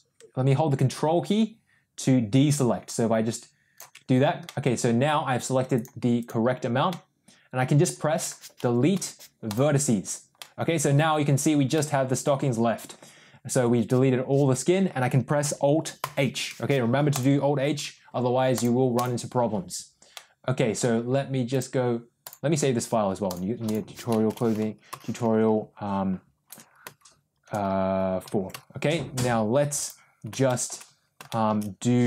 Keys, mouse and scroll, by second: 4.3 middle click, 5.6 click, 6.1 click, 6.8-7.9 middle drag, 8.0 middle click, 8.8 Delete, 10.2 middle click, 11.6 middle click, 12.0 middle click, 15.9 alt+h, 17.0 click, 18.4 click, 20.0 middle click, 21.5-22.2 drag, 30.4 shift+middle click, 31.2 shift+middle click.